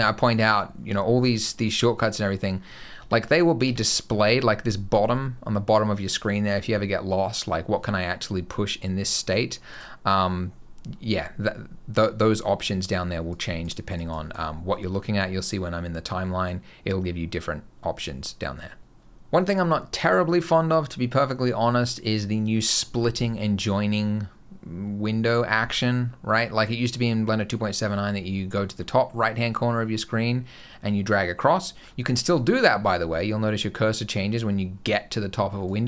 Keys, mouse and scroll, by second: 2.8 Tab, 3.5 Tab, 9.6 right click, 13.1 click, 13.7 click, 14.0 click, 35.5 click.